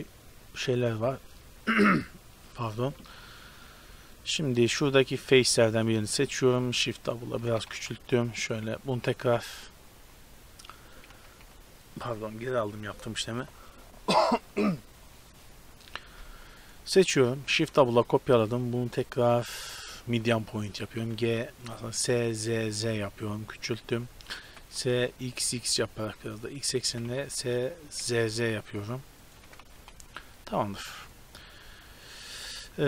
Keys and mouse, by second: 3.3 Tab, 5.2 click, 5.7-7.1 middle drag, 6.9 shift+d, 7.4 s, 11.1 ctrl+z, 11.5 ctrl+z, 16.6-17.6 right drag, 17.6 shift+d, 21.0 s, 21.9 s, 24.5 s, 26.9 s, 29.5 s, 30.6-32.7 middle drag.